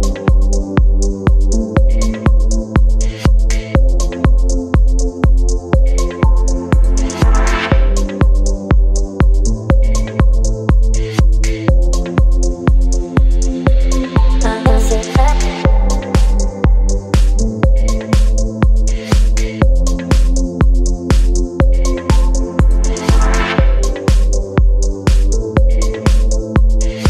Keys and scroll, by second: 4.5 space, 17.6 ctrl+t, 20.4 space, 23.8 Return, 25.1 space.